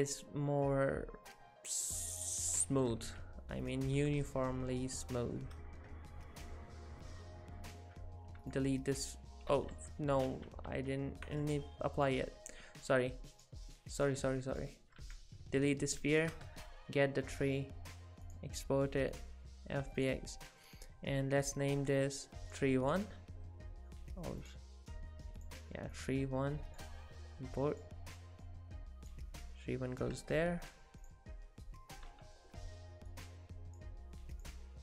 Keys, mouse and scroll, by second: 3.0 alt+a, 3.7 click, 4.0 middle click, 8.1 click, 8.4 x, 9.0 click, 9.5 ctrl+z, 9.7 ctrl+z, 10.3 ctrl+z, 12.0 click, 13.4 click, 14.5 click, 15.0 x, 15.7 click, 16.2 shift+click, 17.3 click.